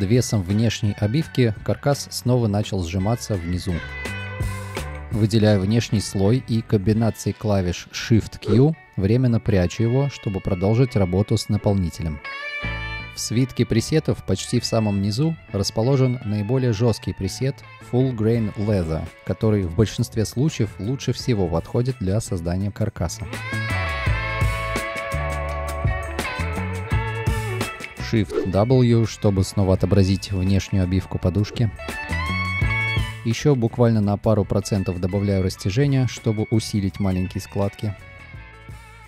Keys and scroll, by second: 2.4 space, 4.5 ctrl+y, 5.3 space, 8.8 shift+q, 10.0 space, 12.1 space, 22.6 space, 23.7 space, 28.3 space, 28.6 shift+w, 33.4 1, 36.0 8, 36.6 space.